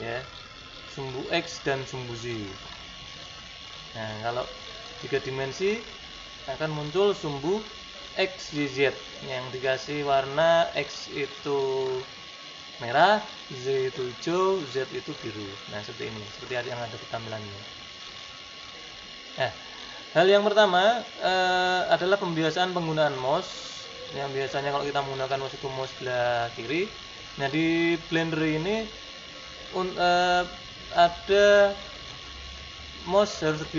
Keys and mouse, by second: 5.6-31.0 middle drag, 31.4-32.8 middle drag.